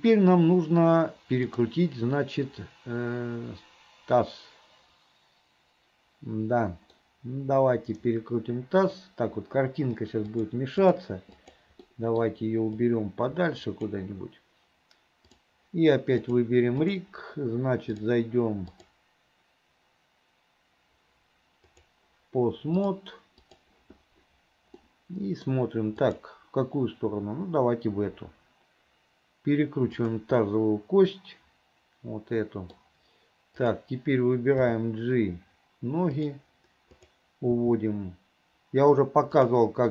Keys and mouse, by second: 7.1-9.0 middle drag, 10.4 click, 12.0 middle click, 13.0-14.0 drag, 15.4 click, 16.4 click, 18.1 click, 18.8-21.2 drag, 21.8 click, 22.9 click, 25.0 middle click, 26.2 click, 28.2 r, 30.6-32.9 middle drag, 34.8 g, 37.0 middle click, 37.6 g.